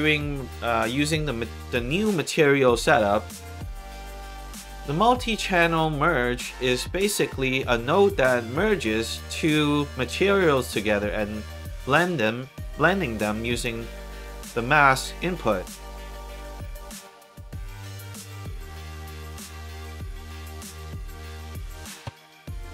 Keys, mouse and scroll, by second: 0.5 middle click, 4.4 click, 5.7 click, 15.5 middle click, 17.2 middle click, 17.6-18.1 scroll down 3, 18.5 middle click, 19.3-19.7 scroll up 2, 20.5 click, 21.4 click, 22.0 1.